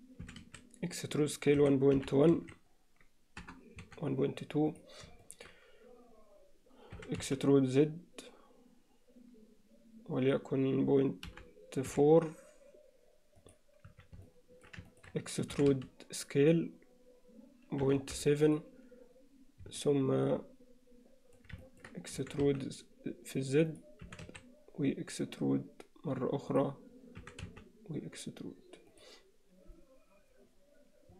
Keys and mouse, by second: 0.3 e, 5.3 shift+middle click, 7.0 e, 13.9 z, 14.3 middle click, 14.9 ctrl+alt+middle click, 15.5 e, 19.8-21.4 middle drag, 21.7 ctrl+middle click, 22.2 e, 24.1 e, 28.9 e.